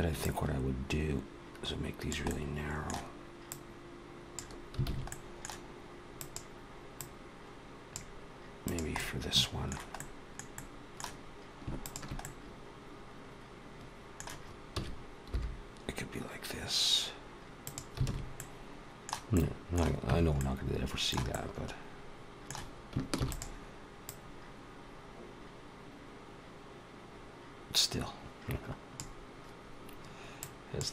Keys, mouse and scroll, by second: 0.0 click, 2.1 middle click, 3.3 click, 4.7 alt+a, 4.9 middle click, 6.0 click, 7.0 click, 8.6 click, 8.8 middle click, 9.8 middle click, 10.4 middle click, 11.6 shift+click, 12.0 middle click, 14.6 s, 18.2 alt+a, 18.2 middle click, 19.2 middle click, 19.9 Tab, 20.2 middle click, 21.2 middle click, 23.0 shift+d, 23.9 click, 30.5 click.